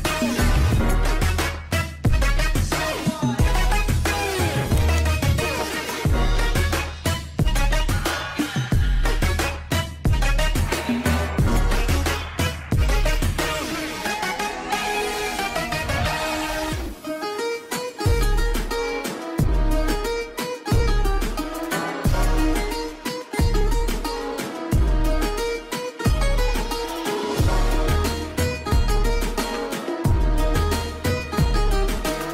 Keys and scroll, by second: 4.4 Escape, 7.3 F2, 12.1 alt+c, 15.0 Escape, 18.4 shift+F2, 18.8 shift+Page_Up, 19.4 F3, 24.8 shift+Page_Down, 25.4 alt+c, 27.0 F4, 27.6 Escape, 29.5 shift+F2, 29.8 shift+Page_Up.